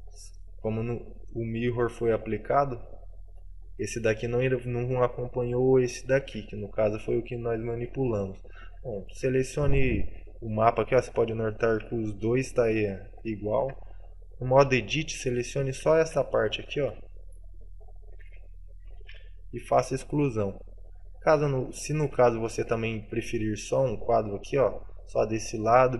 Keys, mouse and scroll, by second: 0.9 middle click, 2.1 shift+middle click, 2.6 scroll up 1, 2.7 middle click, 3.9 right click, 5.1 middle click, 6.0 shift+middle click, 7.7 middle click, 8.8 right click, 9.2 right click, 9.6 right click, 10.9-11.3 scroll down 2, 11.3 middle click, 11.9 g, 13.5 right click, 13.7 Tab, 14.6 middle click, 15.1 right click, 15.7 z, 16.1 c, 18.2 right click, 18.4 alt+z, 19.1 alt+z, 19.9 Delete, 21.1 Tab, 21.5 middle click, 21.8 shift+middle click, 22.3 a, 22.5 middle click, 23.7 right click.